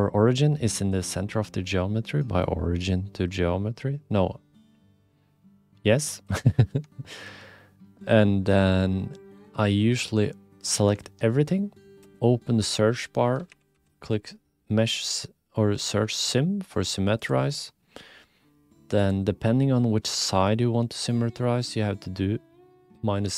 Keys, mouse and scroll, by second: 0.8-6.3 drag, 7.0 shift+click, 8.2-9.5 middle drag, 9.9 a, 11.0 alt+z, 12.0 space, 19.0-23.3 drag.